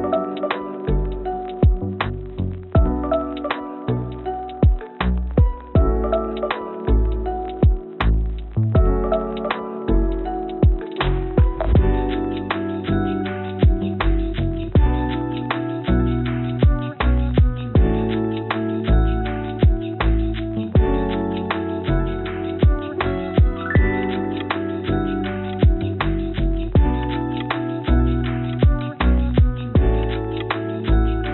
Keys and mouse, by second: 1.3-2.4 middle drag, 2.8 g, 6.0 click, 7.8 g, 11.3 click, 12.8-14.4 drag, 15.4 g, 17.9 click, 18.5 click, 19.7 shift+click, 21.0 click, 22.1 shift+click, 23.1 g, 27.0-28.3 drag, 29.2 click, 30.4 click.